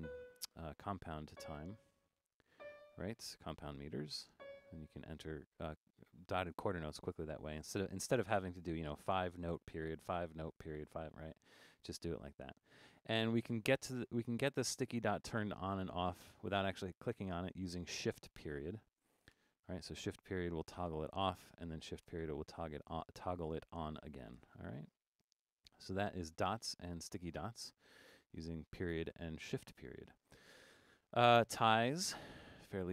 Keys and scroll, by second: 19.3 shift+>, 22.0 shift+>, 24.4 >, 32.7 6.